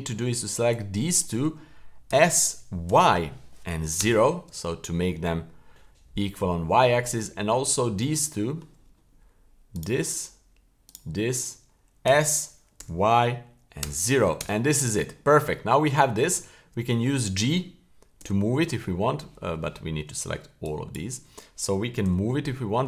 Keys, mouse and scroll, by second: 0.7-1.3 drag, 2.1 s, 6.8 shift+middle click, 7.5-8.1 scroll up 5, 8.2 shift+middle click, 9.7 right click, 10.8 shift+right click, 12.0 s, 15.2-15.7 scroll down 4, 15.7 shift+scroll up 1, 16.1 scroll down 2, 16.4 shift+middle click, 16.8-17.4 scroll down 2, 18.2 g, 20.6 shift+drag, 22.0 g.